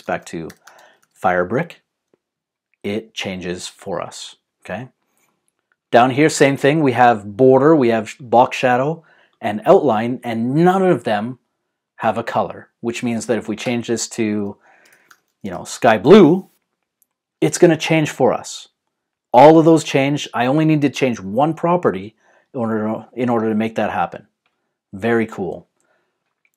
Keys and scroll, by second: 0.0-1.6 typing, 14.6-16.2 typing, 25.3 super+z.